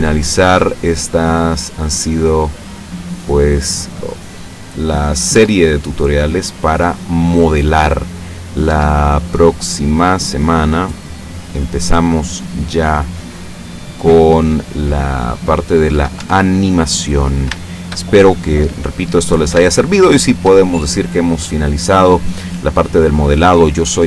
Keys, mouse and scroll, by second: 1.3-5.2 drag, 5.4 Tab, 5.8-7.7 middle drag, 7.8 middle click, 8.7 Tab, 10.5-11.9 drag, 12.6 right click, 13.9 right click, 14.7-16.0 drag, 16.2 Tab, 16.9 scroll down 2, 17.6-18.9 shift+middle drag, 19.0-19.8 scroll up 3, 19.8-20.5 shift+middle drag, 20.6 shift+scroll down 2.